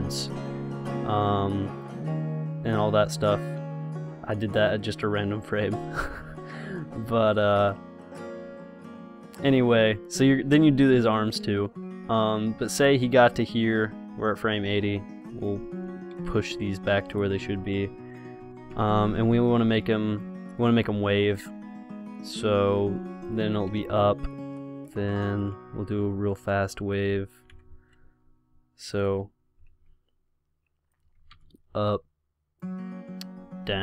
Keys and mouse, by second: 0.2 i, 2.0-4.0 drag, 5.0-9.9 drag, 10.6 r, 13.0-14.9 drag, 15.1 r, 16.4 i, 17.4-18.4 drag, 17.6 r, 19.0 i, 21.6 click, 22.9 r, 24.0 i, 26.6 r, 27.8 i, 29.7 r, 31.6 i, 33.6 r.